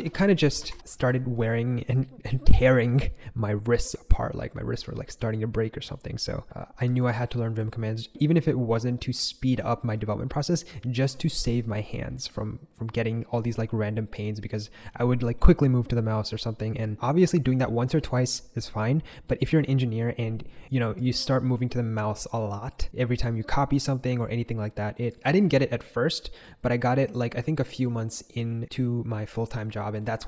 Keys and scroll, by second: 0.5 Escape, 0.6 Escape, 0.7-1.5 typing, 6.8 typing.